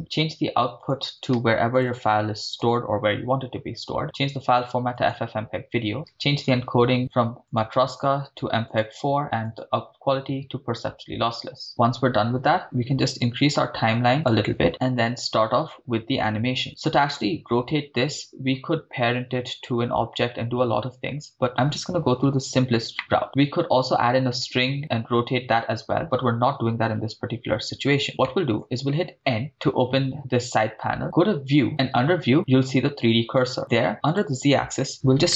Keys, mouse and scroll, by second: 0.8 scroll down 2, 1.0-2.6 drag, 2.6 /, 3.7 scroll down 4, 4.5-5.2 drag, 6.3-6.8 scroll down 3, 6.6 click, 7.5-9.4 drag, 11.4 click, 13.0 scroll up 10, 13.4-14.5 drag, 14.7 middle click, 16.4 scroll up 3, 16.6-17.0 shift+middle drag, 18.2-18.6 scroll down 2, 23.0 middle click, 26.8 KP_1, 28.3 shift+middle click, 29.2 n, 31.5 click, 34.1-35.3 drag.